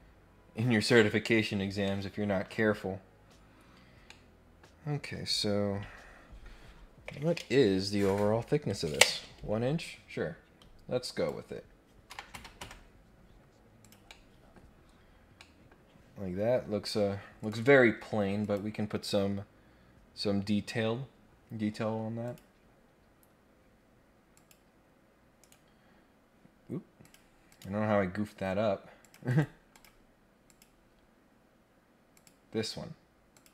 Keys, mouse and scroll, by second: 0.8 click, 1.8 middle click, 3.3 scroll down 1, 3.7 scroll up 1, 4.1 middle click, 11.0 click, 13.8 click, 14.0 middle click, 14.8 scroll down 1, 15.3 middle click, 17.4 click, 18.4 click, 22.2 click, 24.3 click, 25.4 right click, 27.0 click, 27.4 click, 29.0 click, 29.2 right click, 29.7 click, 30.4 click, 32.1 click, 33.3 click.